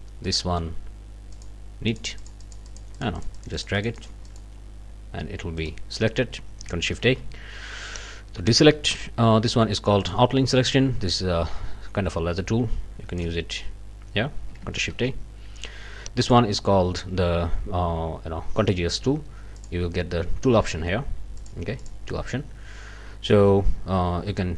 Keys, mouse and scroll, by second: 0.2 click, 1.3 click, 1.9 click, 5.6 click, 7.0 ctrl+shift+a, 10.0 click, 11.2-13.4 drag, 14.9 ctrl+shift+a, 16.2 click, 19.6 click, 21.4 click, 21.8 click.